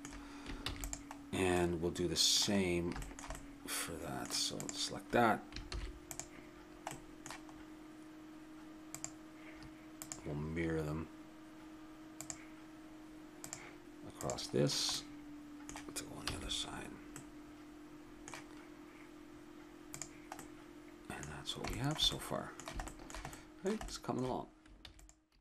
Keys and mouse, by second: 0.1 middle click, 0.7 ctrl+s, 4.6-5.7 drag, 5.7 shift+s, 8.9-11.8 drag, 13.4-15.1 drag, 14.5 middle click, 16.3 a, 16.7-18.2 middle drag, 19.9 click, 20.4-21.8 middle drag, 24.8 ctrl+s.